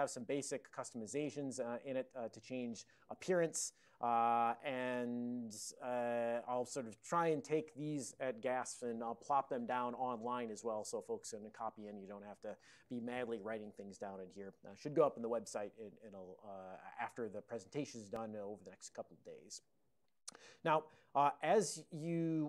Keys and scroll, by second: 6.7 alt+>, 17.2 super+j.